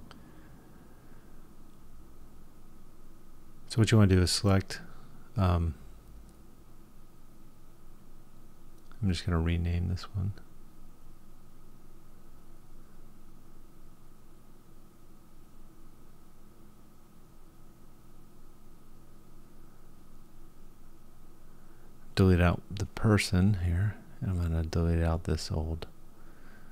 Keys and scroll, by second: 9.7 BackSpace.